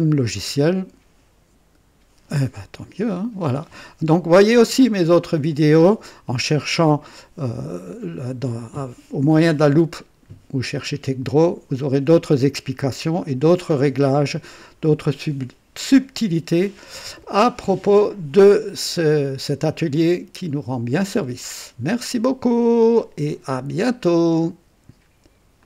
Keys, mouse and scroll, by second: 0.4-0.8 scroll up 1, 1.3 scroll down 1, 24.1 right click, 25.6 click.